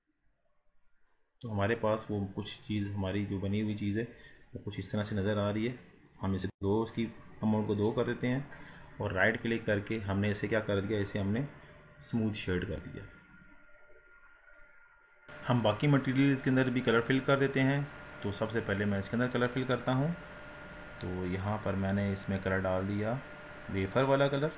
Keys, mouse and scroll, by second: 0.0 click, 1.1-2.3 middle drag, 2.3 scroll down 4, 2.7 scroll up 2, 3.0-3.8 middle drag, 3.8 scroll up 2, 4.4-6.1 scroll up 2, 6.1-8.7 drag, 8.7-11.8 right drag, 13.6 scroll down 5, 14.2-14.6 scroll up 4, 14.6-18.3 middle drag, 18.3 click, 20.0-22.4 drag.